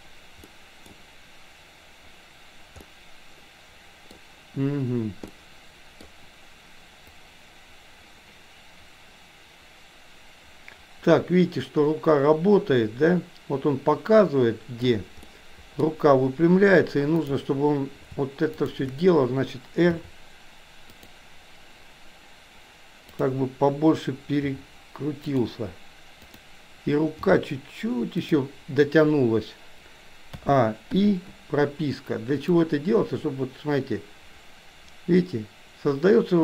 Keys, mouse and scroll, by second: 0.4-0.9 middle drag, 2.8-4.2 middle drag, 5.3-6.2 middle drag, 7.2-14.8 drag, 15.3-15.8 middle drag, 17.3 click, 19.9 r, 23.2 click, 24.4 r, 26.2 click, 27.3 g, 30.3 a, 31.0 i, 32.5-36.4 drag.